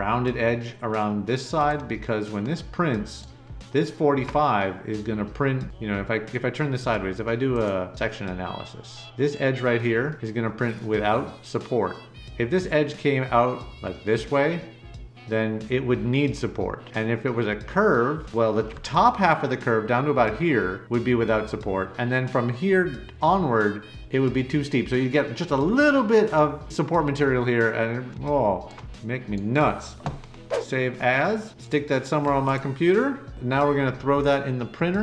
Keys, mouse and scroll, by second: 1.6 middle click, 2.2-3.2 right drag, 5.4 middle click, 5.6-6.7 right drag, 7.5 click, 27.7 middle click, 27.9 middle click, 28.8 right click.